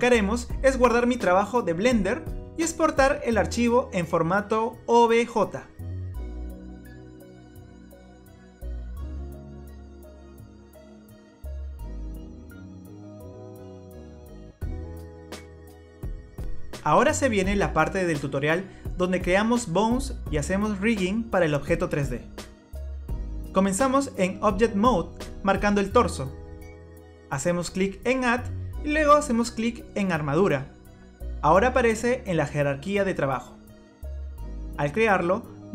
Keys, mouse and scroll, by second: 3.3-6.0 scroll up 1, 7.5 click, 12.5 click, 13.1 click, 15.1 click, 19.1 scroll up 2, 19.5 scroll down 1, 20.1 middle click, 20.1 scroll down 4, 28.4 click, 35.2-35.7 scroll up 7.